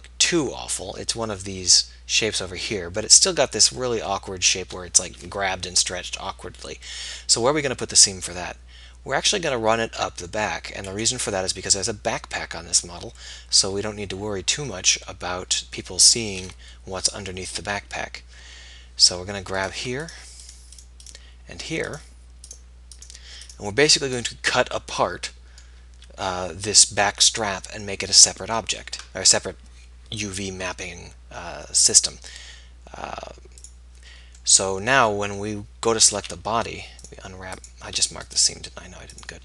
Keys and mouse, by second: 7.4-9.1 middle drag, 10.9-13.8 middle drag, 19.7 right click, 24.4 right click, 34.8 middle click, 36.1 a, 36.4 a.